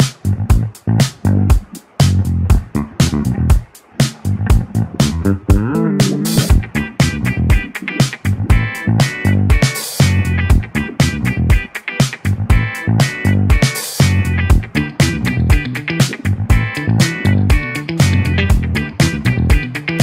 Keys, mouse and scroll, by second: 8.0-8.4 scroll down 6, 9.1-9.5 scroll down 1, 10.0-11.7 middle drag, 11.7-12.6 scroll up 6, 12.6 middle click, 13.0 scroll up 1, 13.2-13.6 scroll down 4, 13.6-14.6 middle drag, 14.6-15.5 scroll down 8, 15.5-16.7 scroll up 5, 16.7-17.2 scroll up 1, 17.2-18.0 scroll up 1, 18.0-19.2 scroll up 6, 19.2-20.0 middle drag.